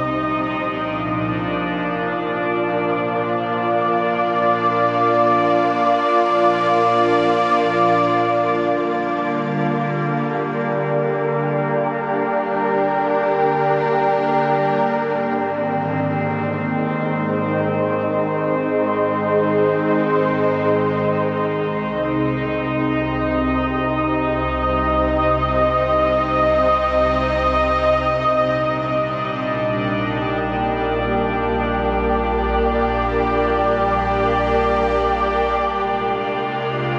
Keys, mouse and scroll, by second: 5.8 alt+click, 10.3 z, 10.5 click, 10.6 space, 10.7 click, 10.8 z, 10.9 click, 12.9 shift+Down, 14.5 click, 15.0 shift+Up, 16.2 click, 17.1 alt+click, 17.7 z, 17.8 click, 18.0 space, 18.2 click, 18.4 click, 18.6 space, 18.8 click, 20.6 right click, 21.5 click, 24.7-26.6 shift+drag, 27.0 scroll down 1, 27.2-28.0 typing, 27.6 click, 31.1-31.7 scroll up 1, 31.9 shift+Up, 32.8 click, 33.6 shift+Down, 34.3 z, 34.4 click, 34.8 z, 34.9 click, 34.9 space.